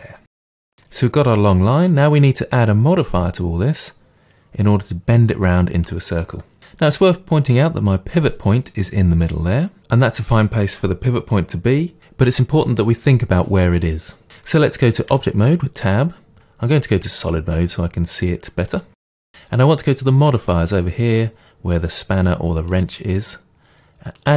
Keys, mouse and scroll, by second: 0.3-17.3 middle drag, 1.2-1.5 scroll down 2, 15.1 Tab, 17.3-18.8 drag, 18.8-22.7 middle drag, 22.7-24.3 drag.